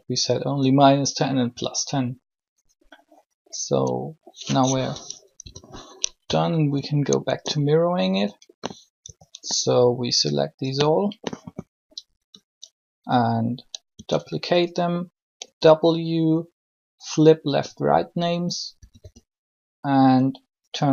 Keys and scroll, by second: 5.3 1, 7.2 Tab, 8.0 a, 9.0 b, 13.9 shift+d, 15.4 w, 18.6-19.0 typing.